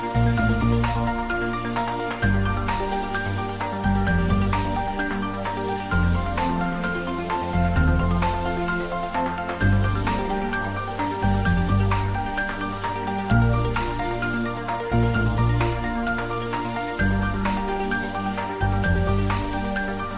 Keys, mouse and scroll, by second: 0.8 middle click, 1.8 click, 2.0 middle click, 2.6 s, 3.3 click, 4.0 ctrl+middle click, 5.1 ctrl+z, 5.5 Tab, 7.0 s, 7.8 click, 8.0 ctrl+z, 8.6 click, 9.0 s, 10.0 click, 10.2 Tab, 10.6 s, 11.0 click, 11.0 s, 12.4 z, 13.8 click, 14.0 ctrl+z, 14.7 shift+middle click, 15.5 click, 15.8 middle click, 16.8 ctrl+middle click, 17.1 middle click, 17.5 ctrl+middle click, 17.9-19.3 middle drag, 19.3 click, 19.6 shift+middle click.